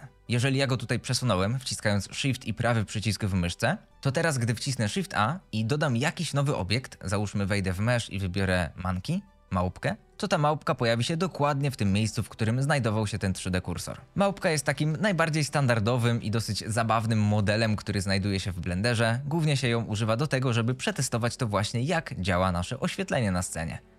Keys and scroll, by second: 5.2 shift+a, 14.4 g, 14.8 z, 15.4 s, 16.6 g, 16.9 z, 17.6 r, 17.9 x, 19.6 r, 20.0 z, 20.8 g, 21.1 z, 22.5-23.9 typing.